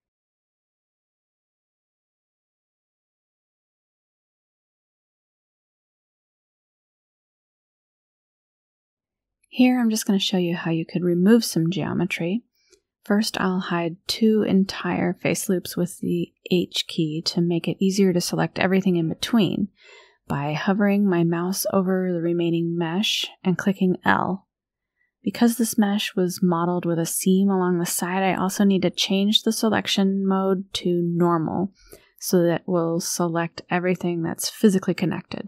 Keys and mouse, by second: 1.7 middle click, 3.0 a, 4.2-6.1 drag, 7.0 middle click, 7.2 Delete, 7.7 shift+click, 10.9 alt+click, 16.2 h, 17.3 shift+click, 18.7 alt+click, 20.5 h, 23.1 l, 23.9-25.9 drag, 28.3 click, 31.4-33.2 drag, 33.7 Delete.